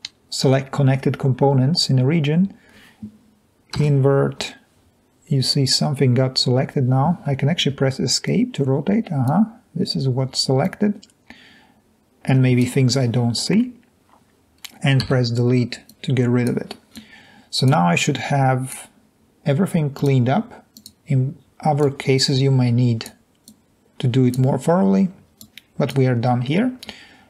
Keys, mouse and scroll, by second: 3.9 i, 7.6 Escape, 9.2 click, 15.1 Delete, 16.9 drag, 18.1-18.7 drag, 25.4 click.